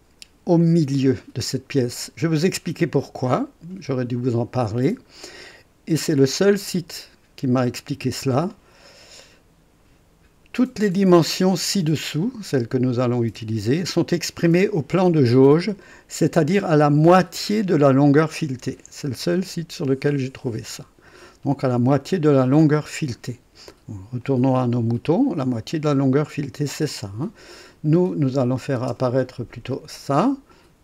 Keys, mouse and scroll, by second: 3.4 click, 5.0-5.3 scroll up 1, 8.9 scroll down 1, 19.4 scroll down 2, 24.2 click, 26.9 click, 28.3 click, 29.0 space, 30.4 click.